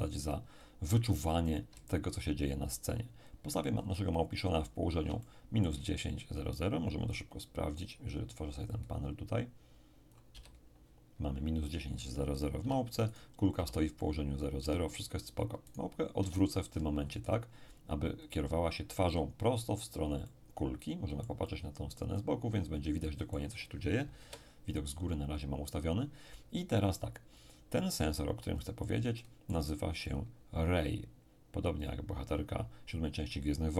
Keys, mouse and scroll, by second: 1.6-3.7 ctrl+drag, 3.7-4.8 ctrl+scroll up 1, 4.8-5.2 scroll down 2, 5.2 shift+middle click, 5.9-6.7 shift+scroll down 1, 6.7 scroll down 1, 8.7-11.1 drag, 10.3 n, 12.6 n, 13.1 right click, 13.6 n, 14.6 n, 15.7 right click, 16.2 r, 18.2 ctrl+click, 20.2-24.3 middle drag, 24.2 KP_7, 28.5-29.2 scroll up 1, 29.2-31.1 middle drag, 30.1 click, 31.8 click.